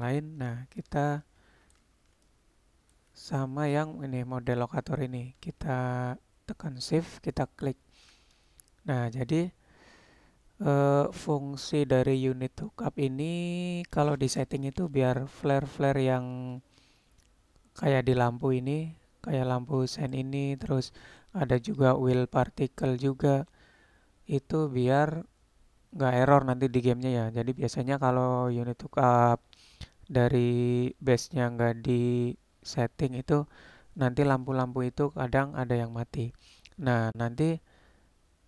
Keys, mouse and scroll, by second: 0.9 shift+click, 1.1-1.8 shift+middle drag, 2.3-3.1 shift+middle drag, 7.4 shift+click, 20.0 click, 36.7-37.5 middle drag.